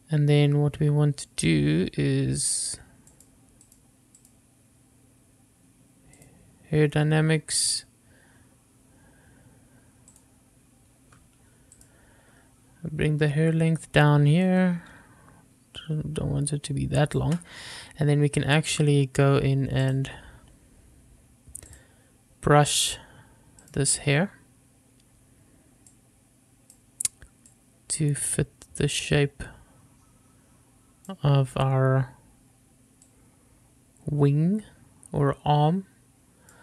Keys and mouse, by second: 3.3 click, 3.8 click, 4.4 click, 6.4 click, 8.0-10.5 drag, 12.0 click, 14.7-17.5 drag, 20.2-22.1 drag, 26.2 click, 27.8-31.4 drag, 33.3-36.6 drag.